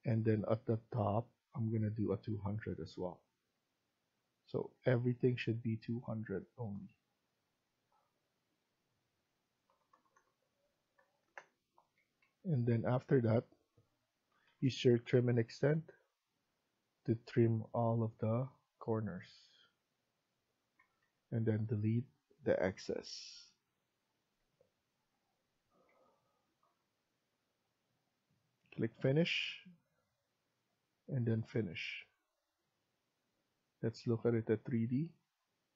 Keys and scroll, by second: 4.4 Escape, 4.7 Escape, 9.6-9.9 typing, 11.2 Return, 11.6 Escape, 11.9 Escape, 12.1 Escape, 14.0-14.7 typing, 20.6 Escape, 20.9 Escape, 22.6 Delete, 24.3 Delete, 25.6 Escape, 25.8 Escape.